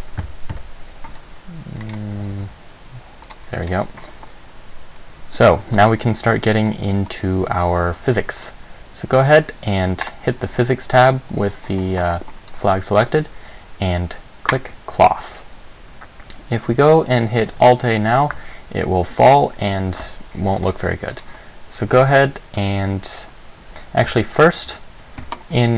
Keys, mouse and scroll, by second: 0.7 KP_0, 2.0 right click, 2.3 g, 3.5 click, 3.8 right click, 10.2 click, 14.7 click, 17.7 alt+a, 20.1 Escape, 20.8 Tab, 21.3 right click, 24.3 Tab, 24.9 Tab, 25.4 a.